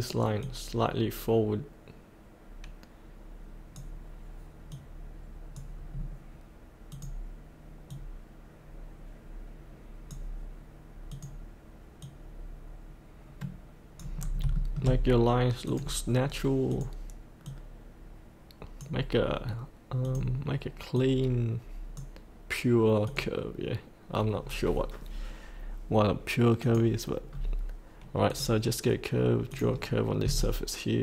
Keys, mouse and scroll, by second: 5.9-6.9 scroll down 1, 6.9-10.2 drag, 14.1 scroll up 1, 14.6 shift+middle click, 15.6-22.3 drag, 27.3 scroll up 1, 28.3 click, 30.3-31.0 shift+drag.